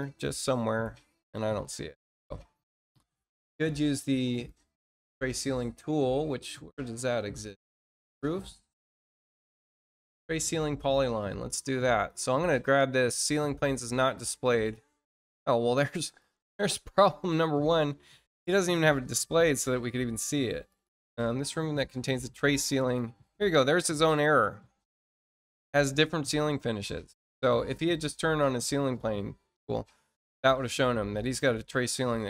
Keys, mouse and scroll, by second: 1.4-1.7 scroll down 2, 2.7 middle click, 4.2 click, 10.7 click, 11.4 click, 13.6 click, 19.1 click, 20.6 click, 22.7 click, 30.4 click.